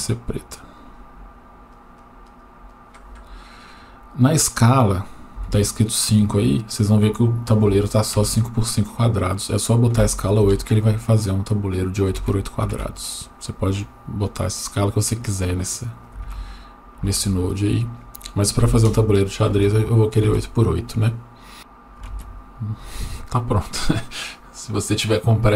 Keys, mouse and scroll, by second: 0.7 click, 9.2-10.5 drag, 13.8-16.0 drag, 17.8-18.9 drag.